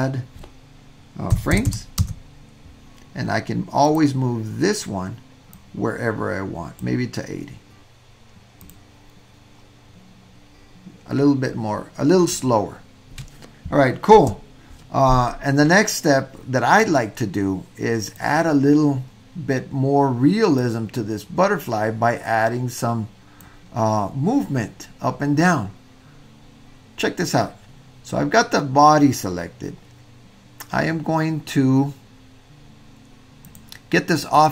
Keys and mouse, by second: 1.7 KP_0, 3.8 click, 5.5-6.8 drag, 8.7 click, 14.3 space, 16.9-18.2 drag, 20.7-23.4 drag, 33.4 click, 34.3 click.